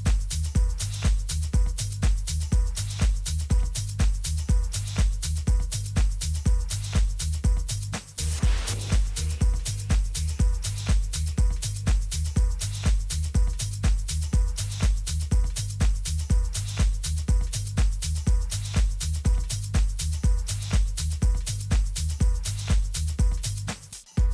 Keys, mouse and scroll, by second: 0.2-2.2 middle drag, 2.2 Tab, 3.7 z, 4.3-5.6 middle drag, 6.0-8.8 drag, 7.9 middle click, 9.4 alt+h, 10.0-11.3 middle drag, 10.6 a, 11.3-13.1 right drag, 12.6-14.5 drag, 15.1 middle click, 19.4 KP_3, 21.2-23.0 middle drag.